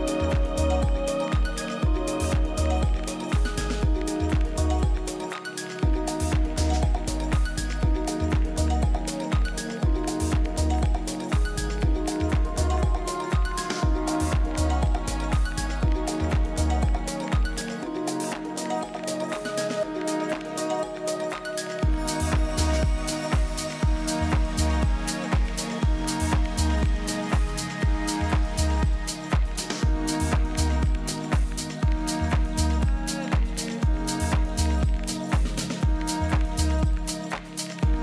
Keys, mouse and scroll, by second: 0.3 F6, 4.1-5.9 middle drag, 7.7 s, 11.6-13.6 middle drag, 13.6-15.5 drag, 15.6 s, 17.4 z, 18.2 middle click, 19.5-21.4 drag, 21.9 z, 22.5 z, 24.2-26.0 drag, 28.7-30.5 drag.